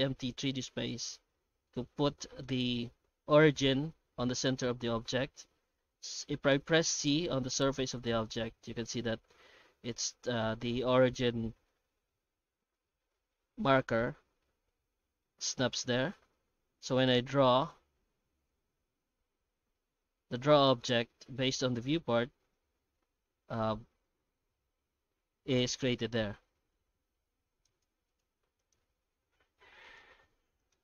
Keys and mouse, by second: 27.9 x, 28.6 right click, 29.2 shift+q.